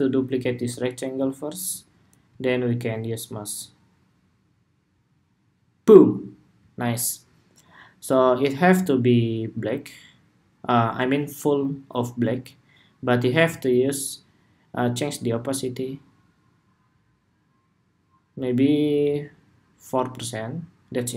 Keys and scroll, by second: 0.2 super+d.